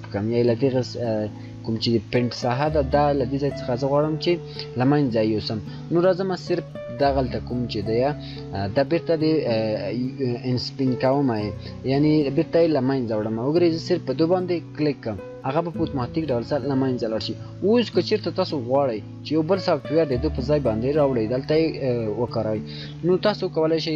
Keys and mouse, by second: 13.8 shift+click.